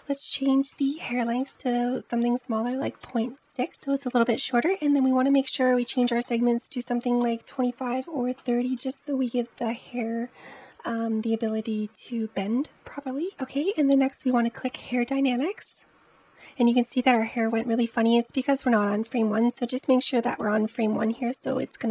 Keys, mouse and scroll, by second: 0.6-3.5 drag, 4.8-7.7 drag, 8.2-11.2 middle drag, 12.9 scroll down 2, 15.1 click, 20.2-21.9 drag.